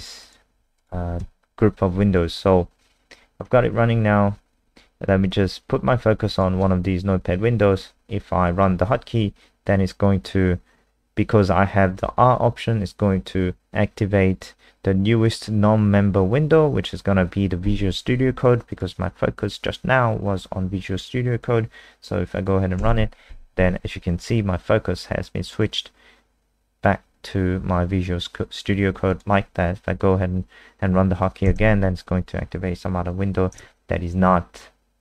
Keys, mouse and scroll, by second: 0.2 click, 0.7 click, 1.2 F5, 6.3 click, 22.8 KP_0, 29.1 click, 31.4 KP_0, 33.5 KP_Add.